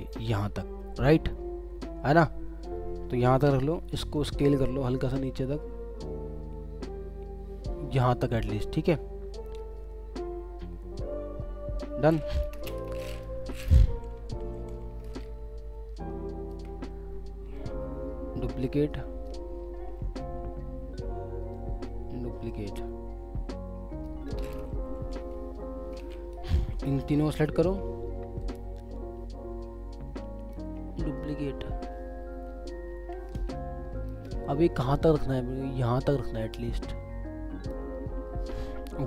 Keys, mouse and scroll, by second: 2.1-2.7 alt+scroll down 1, 3.4 ctrl+t, 5.1 shift+click, 12.6 Return, 14.1-16.1 Right, 17.1 alt+scroll down 2, 17.5 alt+click, 20.9-21.2 alt+scroll down 1, 21.5 alt+click, 24.8 Left, 28.4 alt+click, 30.9 alt+scroll, 31.0 click, 31.0 alt+scroll up 1, 33.3 space, 38.3 alt+scroll up 1.